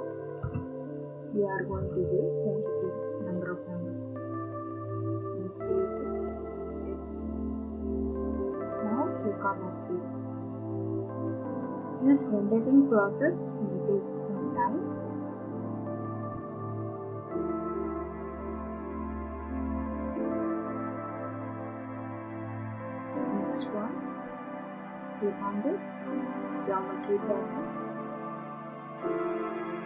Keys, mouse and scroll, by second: 0.4 BackSpace, 1.7 2, 1.9 2, 5.9 click, 10.6 click, 25.0 right click, 25.1 click, 26.7 click, 27.7 click.